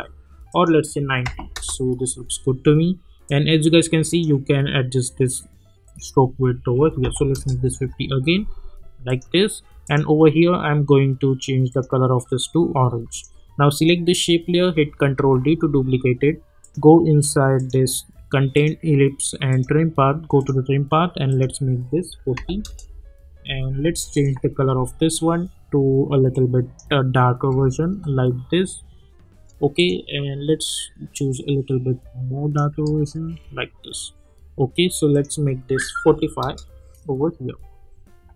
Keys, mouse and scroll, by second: 0.5 click, 1.5 Return, 3.5-5.8 drag, 7.3 Return, 9.1 click, 15.1 ctrl+d, 16.6 click, 22.6 Return, 24.1 click, 27.5 Return, 29.7-32.7 drag, 32.7 Return, 35.1 click, 36.4 Return.